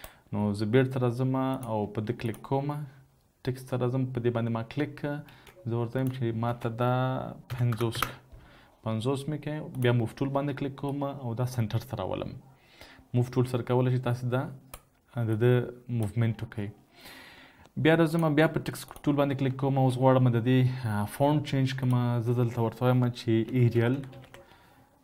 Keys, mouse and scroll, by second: 5.5 ctrl+a, 6.7 ctrl+a, 7.6 typing, 8.1 Return, 19.8 ctrl+a, 23.6-24.3 typing.